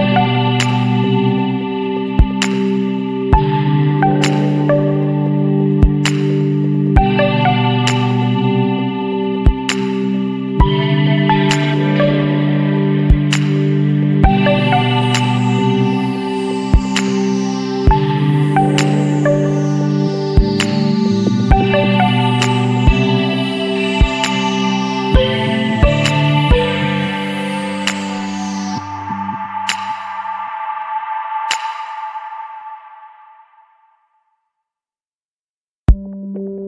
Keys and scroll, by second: 0.4 ctrl+space, 1.4 Delete, 1.9 Delete, 2.3 Delete, 2.5 Delete, 2.9 space, 3.0 ctrl+-, 7.4 Return, 8.0 ctrl+=, 9.3 [, 10.2 ctrl+alt+z, 17.1 ctrl+t, 21.1 Return.